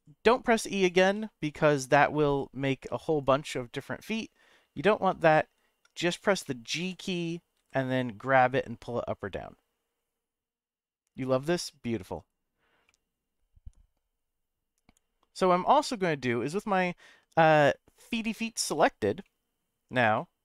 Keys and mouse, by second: 0.8 click, 1.0 e, 1.5 click, 1.9 e, 2.3 click, 2.9 e, 3.2 click, 3.7 middle click, 4.7 ctrl+z, 6.6 middle click, 6.8 g, 7.6 z, 12.1 right click, 12.8-16.4 middle drag, 18.1 click, 19.2 middle click, 20.1 shift+middle click.